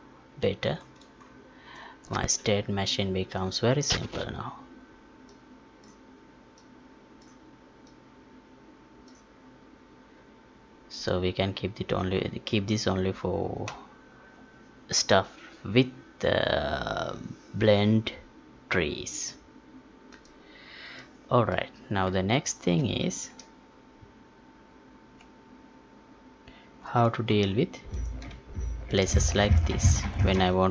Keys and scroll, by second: 23.0 ctrl+p.